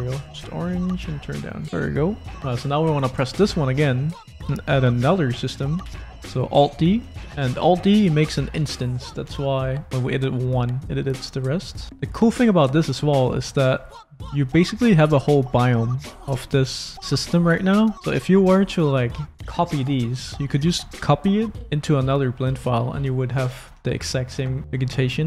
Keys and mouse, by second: 0.2 click, 1.7 middle click, 2.3 click, 2.9 click, 3.8 click, 5.9 alt+d, 7.2 click, 9.3 Tab, 9.9 a, 10.2 s, 12.7 shift+middle click, 13.3 click, 13.3 middle click, 13.4 click, 13.8 s, 17.9 Tab, 18.0 click, 19.3 click, 20.2 click, 23.5 middle click, 23.8 shift+click, 24.8 Tab.